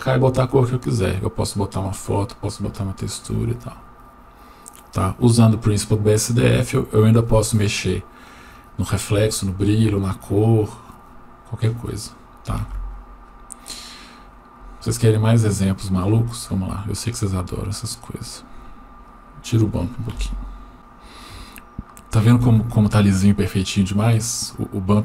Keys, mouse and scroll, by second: 15.6 drag, 17.6-18.5 scroll down 1, 19.1 click, 20.2 Delete, 20.7-21.3 scroll down 1, 21.5 shift+middle click.